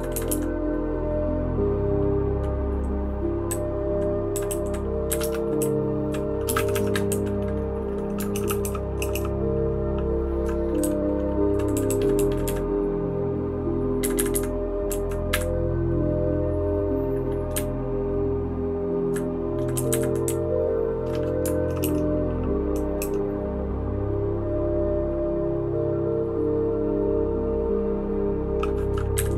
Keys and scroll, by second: 0.1 Up, 0.3 Up, 3.5 Down, 4.3 Down, 4.5 Down, 4.6 Down, 5.1 Up, 5.2 Return, 5.6 Down, 6.1 Down, 6.4 space, 6.6 e, 6.7 e, 7.1 Down, 8.3-9.1 typing, 10.8 Down, 11.3 Down, 11.4 Down, 11.5 Down, 11.7 Down, 11.9 Down, 11.9 Down, 12.2 Down, 12.3 Down, 12.4 Down, 14.0 Up, 14.2 Up, 14.3 Up, 14.9 Down, 15.3 Up, 17.5 Up, 18.0-19.0 Up, 19.7 Up, 20.2 Up, 20.2-21.0 Down, 21.8 shift+], 23.0 }, 29.1 Up.